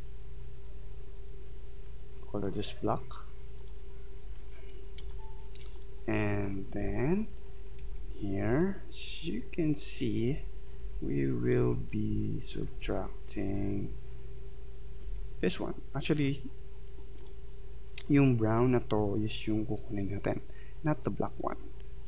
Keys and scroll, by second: 5.0 space, 7.8 Left, 8.5 Right, 10.2 Left, 12.1 Right, 15.1 Left.